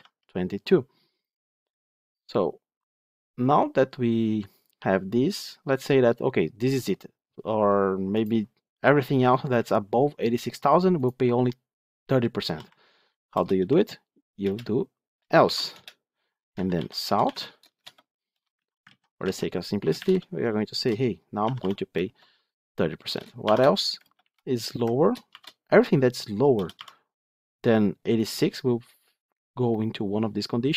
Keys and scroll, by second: 14.3 Return, 17.2 Tab, 17.6 shift+Return, 18.4 ctrl+z.